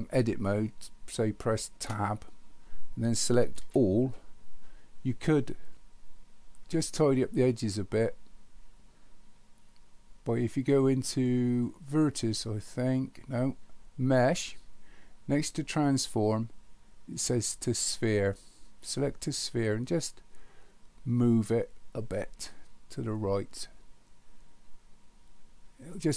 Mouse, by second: 11.9-25.9 drag.